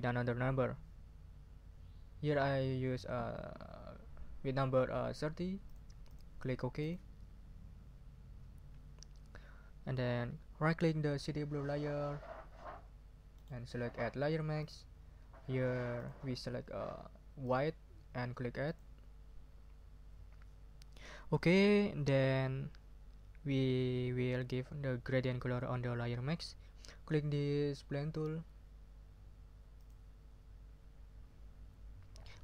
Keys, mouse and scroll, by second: 5.6 click, 6.0 click, 6.8 click, 13.3 right click, 14.5 click, 15.9 click, 17.4 click, 18.6 click, 29.8 click.